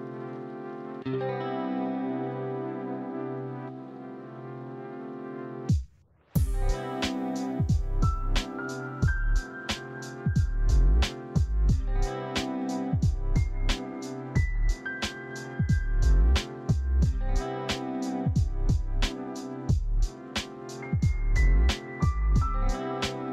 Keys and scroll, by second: 0.6 shift+Tab, 1.1 Delete, 1.5 Tab, 11.6 typing, 11.6 Return, 19.6 Tab, 20.1 Tab, 21.3 Escape, 21.3 ctrl+z, 21.6 a, 22.2 e.